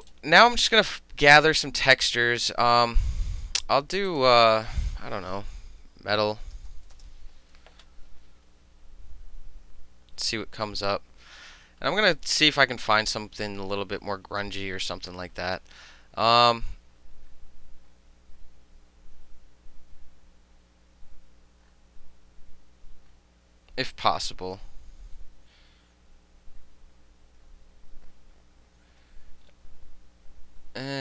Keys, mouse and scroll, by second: 0.1 click, 0.9 click, 4.1 click, 6.2-7.1 typing, 11.7 click, 12.4 click, 13.1 click, 13.9 click, 14.7 click, 16.7 click, 17.3 click, 17.9 click, 18.9 click, 27.5 click, 29.0 drag, 29.5 click, 29.6 click, 30.9 click.